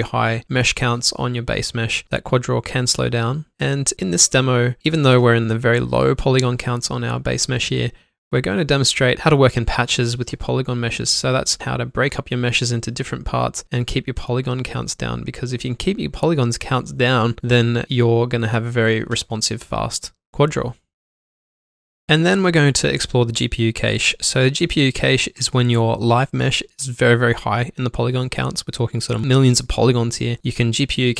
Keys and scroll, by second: 1.4 alt+q, 2.2 alt+shift+d, 3.3 ctrl+alt+shift+c, 3.7 ctrl+shift+q, 4.6 Delete, 5.2 ctrl+shift+q, 5.6 b, 6.3 1, 7.2 ctrl+z, 7.8 Tab, 8.8 alt+shift+d, 9.5 ctrl+alt+shift+c, 10.1 alt+shift+d, 10.5 ctrl+`, 11.1 alt+1, 11.2 w, 13.0 ctrl+alt+shift+w, 14.2 alt+q, 16.2 q, 16.3 alt+shift+d, 17.0 1, 18.1 q, 20.0 ctrl+alt+shift+c, 20.3 alt+shift+d, 25.3-26.6 typing, 27.0 Delete.